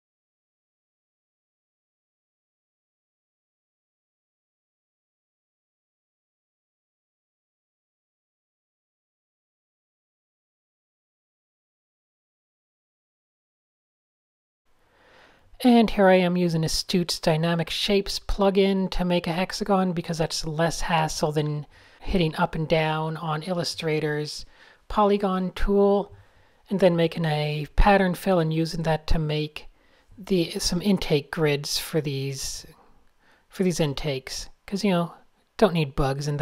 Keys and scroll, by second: 1.3 super+z, 2.4 a, 3.5 shift+super+a, 4.0 shift+super+Tab, 4.9 super+z, 5.0 super+z, 8.8 Tab, 9.0 Tab, 12.8 shift+m, 15.2 super+z, 15.8 super+space, 17.6-18.5 typing, 18.5 super+p, 20.9-21.9 typing, 22.8 super+0, 23.0 shift+super+a, 24.6-26.1 typing, 27.0 alt+shift+super+r, 29.9 super+z, 30.3 super+s, 30.5 super+space, 30.6 super+space, 31.6-34.2 typing, 35.2 typing.